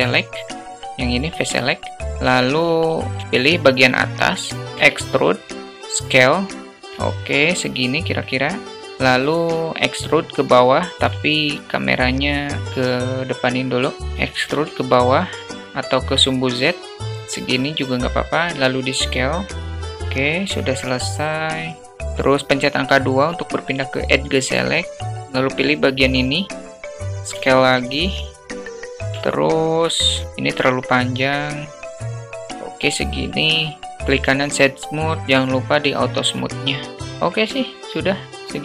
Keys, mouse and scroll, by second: 0.0 middle click, 1.9 alt+z, 3.2 click, 3.2 a, 4.5 middle click, 4.9 e, 7.3 alt+middle click, 14.3 e, 18.2 s, 20.0 alt+middle click, 22.0 2, 26.1 click, 26.3 click, 27.5 s, 29.0 Tab, 29.5-30.1 alt+middle drag, 30.8-32.3 drag, 35.7 q, 36.7-38.1 alt+middle drag.